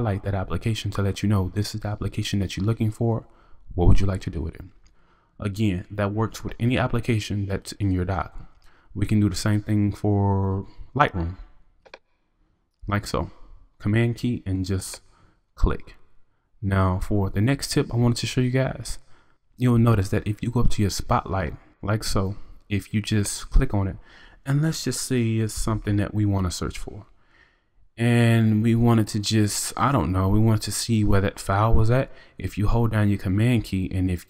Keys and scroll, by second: 25.3-26.2 typing.